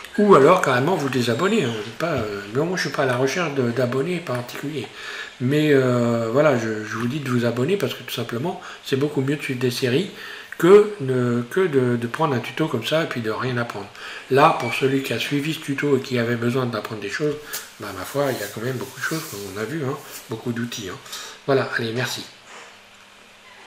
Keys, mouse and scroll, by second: 1.6-2.0 scroll down 2, 2.2 scroll up 1, 3.2-5.5 middle drag, 5.5 scroll up 1, 7.1-10.1 middle drag.